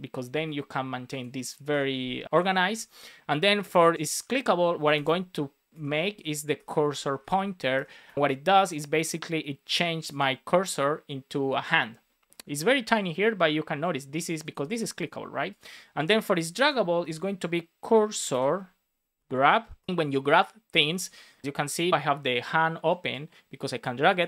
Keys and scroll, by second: 1.6 Tab, 5.6 Return, 6.0 shift+;, 6.5 BackSpace, 7.7 Return, 8.0 super+s, 16.5 Tab, 19.2 Return, 19.7 Return.